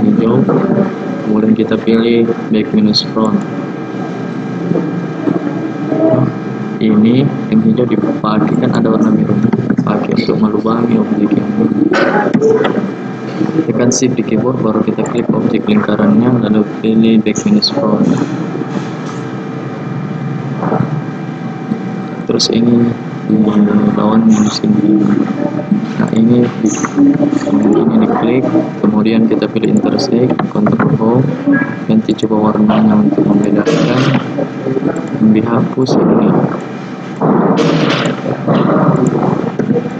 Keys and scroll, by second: 9.6 ctrl+z, 30.7 ctrl+Home.